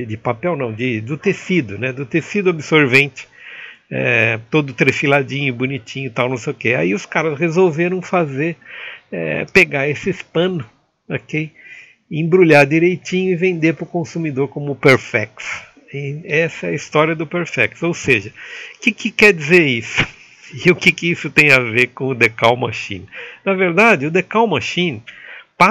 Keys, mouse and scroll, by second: 4.1 Escape, 4.1 a, 4.8 shift+middle click, 6.3 shift+middle click, 6.8-18.3 shift+middle drag, 18.3 Tab, 18.3 click, 18.3 a.